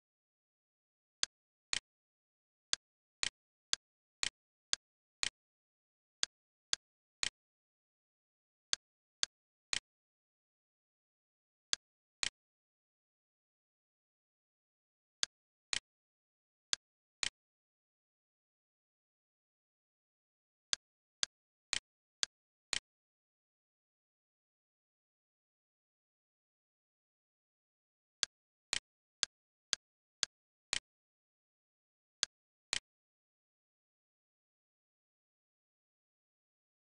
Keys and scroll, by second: 3.4 Escape, 4.7 x, 8.8 x, 13.5 l, 17.9-19.8 typing, 33.1 1, 34.5 ., 35.9 4, 36.6 1.